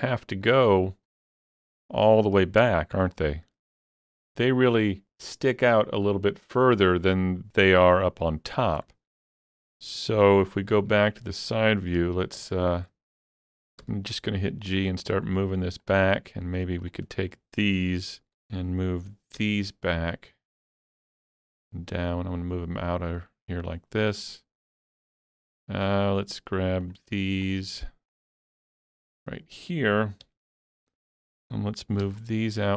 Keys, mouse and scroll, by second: 0.4 middle click, 1.1-1.5 scroll down 4, 1.5-11.0 middle drag, 3.0 shift+click, 9.8 KP_3, 10.7 z, 11.0-12.0 scroll up 2, 12.0 scroll up 1, 12.0 alt+z, 12.6 shift+middle click, 13.8 g, 15.8 click, 16.4 click, 18.4 1, 19.4 g, 24.2-28.1 middle drag, 26.9 click, 27.5 shift+click, 28.1 shift+click, 29.2 shift+click, 30.3 KP_3, 32.0 g.